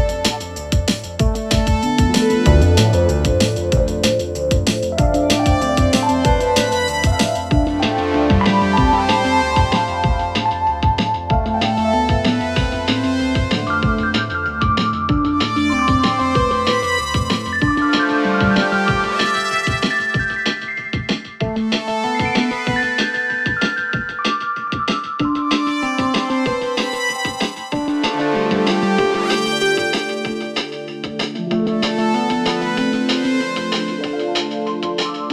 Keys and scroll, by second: 28.9 7, 34.2 4.